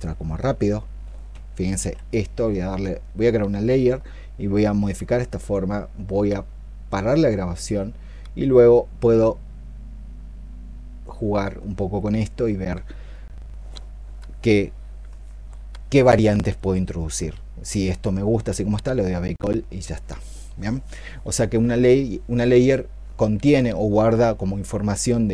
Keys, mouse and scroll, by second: 1.6 ctrl+z.